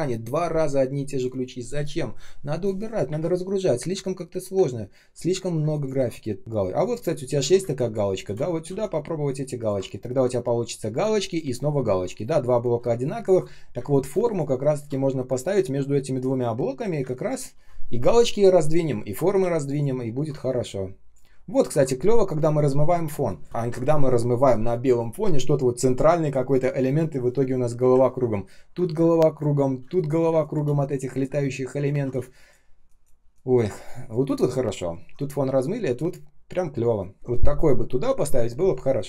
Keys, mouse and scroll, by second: 3.0 Delete, 5.5 space, 6.4 ctrl+scroll up 1, 6.4 space, 6.7 ctrl+click, 7.1 ctrl+scroll down 1, 7.2 ctrl+c, 7.5 space, 8.0 space, 8.0 space, 8.3 ctrl+scroll up 1, 8.6 ctrl+v, 9.8 ctrl+scroll down 1, 10.9 space, 11.9 ctrl+scroll down 1, 12.7 space, 13.2 space, 16.9 space, 19.3 ctrl+z, 19.6 ctrl+click, 19.9-20.4 ctrl+scroll up 1, 20.4 space, 20.9 space, 20.9 space, 21.4-22.0 ctrl+scroll down 1, 23.0 space, 23.4 ctrl+scroll up 1, 23.4 space, 28.0-28.9 ctrl+scroll down 1, 28.9 space, 29.4 space, 29.4 space, 31.1 r, 31.8 ctrl+z, 32.1 space, 32.6 space, 32.6 space.